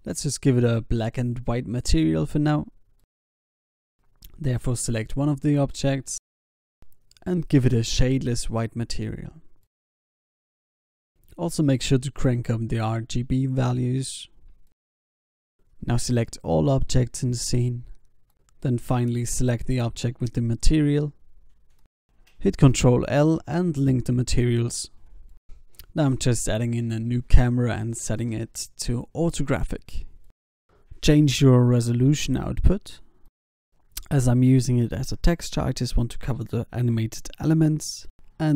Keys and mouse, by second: 0.7 ctrl+s, 1.1 a, 1.7 a, 2.0 ctrl+s, 2.4 alt+a, 2.7 ctrl+s, 16.8 middle click, 17.7 a, 17.8 a, 20.0 ctrl+l, 21.1 Down, 22.6 F12, 24.4 a, 25.9 shift+a, 28.0 alt+g, 28.1 alt+r, 28.7 g, 29.9 ctrl+KP_0, 33.1-38.1 drag.